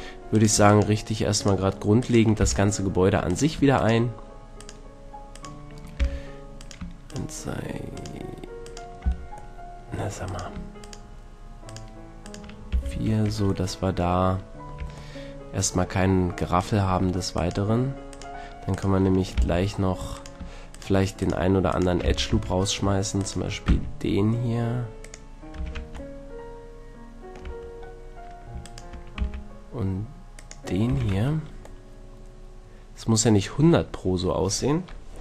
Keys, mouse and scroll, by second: 0.2 click, 2.4 f, 6.0 f, 9.1 c, 12.7 f, 12.9 a, 13.3 Tab, 14.8 Tab, 17.0-18.2 right drag, 18.3 right click, 19.4 f, 22.1 f, 22.3 a, 23.7 x, 25.6 a, 25.7 Tab, 26.1-27.3 middle drag, 27.5 Tab, 29.2 x, 30.9 a, 31.1 Tab.